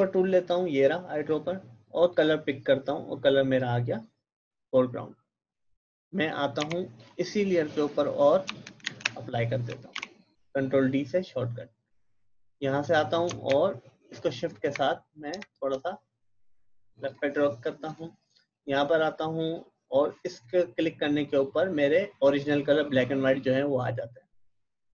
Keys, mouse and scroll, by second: 2.2 click, 6.6 v, 6.9 click, 8.8 alt+Delete, 10.0 ctrl+d, 12.4 click, 13.5 shift+Left, 15.3 shift+Right, 17.1 click, 20.3 click.